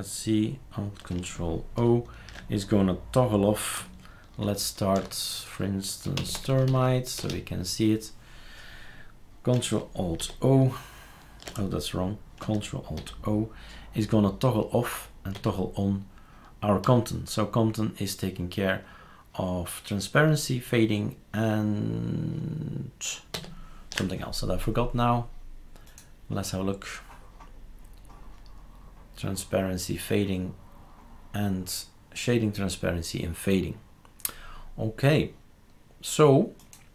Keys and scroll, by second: 4.8 shift+super+d, 5.8-7.2 typing, 10.2 shift+super+o, 13.0 ctrl+alt+o, 15.3 ctrl+alt+o, 16.8 ctrl+alt+o, 23.3 ctrl+alt+o.